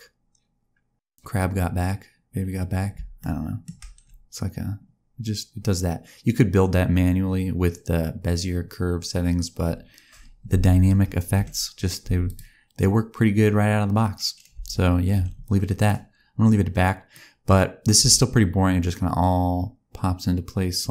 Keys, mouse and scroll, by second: 3.1 shift+middle click, 11.3 t, 14.5 space, 15.1 t, 17.1 click, 17.9 space.